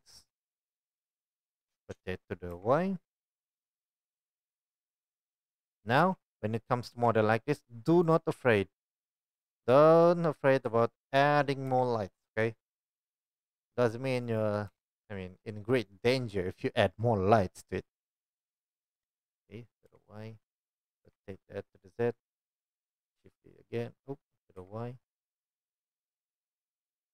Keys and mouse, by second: 0.3 g, 0.8-5.9 right drag, 1.7 r, 6.0 shift+d, 6.1-8.1 right drag, 8.1-11.8 middle drag, 8.7 g, 10.3 r, 12.9 g, 14.6 g, 18.1 shift+d, 21.0 r, 21.6-24.3 middle drag, 22.9 shift+d, 25.8 r, 25.9-27.1 middle drag.